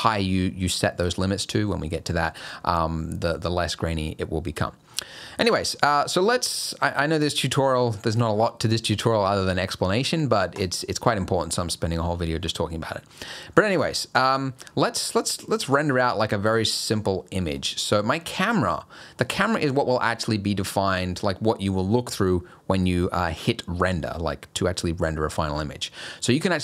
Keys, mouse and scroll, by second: 4.8-6.0 scroll down 6, 5.4 shift+middle click, 10.5 click, 13.1-14.7 scroll down 12, 15.2 middle click.